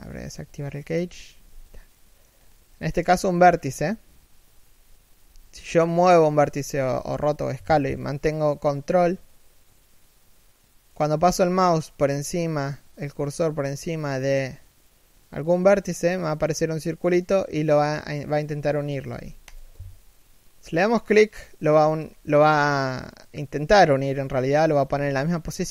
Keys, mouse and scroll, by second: 1.5 middle click, 2.0 scroll up 1, 2.3 scroll down 1, 2.4 middle click, 5.0 g, 20.9 middle click, 21.7-23.8 scroll up 1, 23.8 scroll down 1, 24.0 z, 24.4 scroll up 1, 25.2-25.7 scroll up 1.